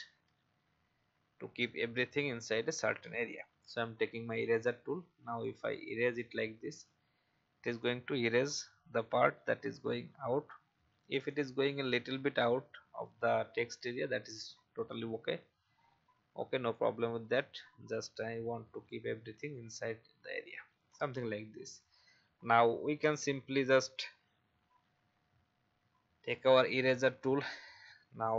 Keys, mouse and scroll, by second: 3.4 shift+e, 4.5 alt+click, 7.8-9.9 alt+drag, 11.3-14.8 alt+drag, 15.7-16.3 scroll up 1, 16.7-18.9 alt+drag, 20.7 v, 21.5-21.8 alt+scroll down 1, 22.4-24.6 alt+scroll up 1, 26.6 shift+e.